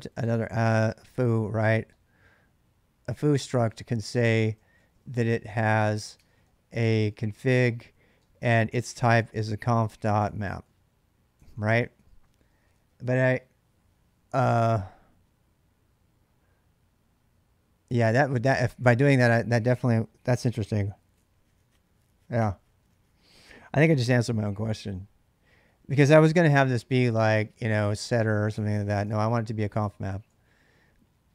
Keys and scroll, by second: 0.0-12.3 typing, 6.0 Tab, 18.8 ctrl+[, 18.9 k, 26.1 ctrl+[, 26.3-30.6 typing.